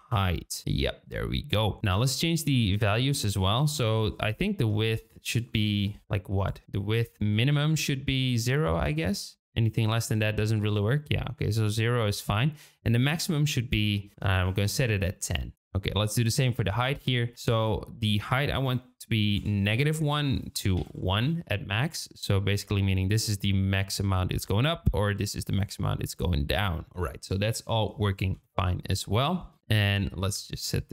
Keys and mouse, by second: 2.3 click, 3.2-4.7 drag, 5.1-6.6 drag, 6.6 ctrl+z, 7.3-10.6 drag, 13.0-14.7 drag, 15.2 click, 16.2 click, 17.3-20.2 drag, 20.4 click, 22.0-25.6 drag, 26.1-26.9 middle drag, 28.3 KP_0, 29.4 KP_0, 30.6-30.9 drag.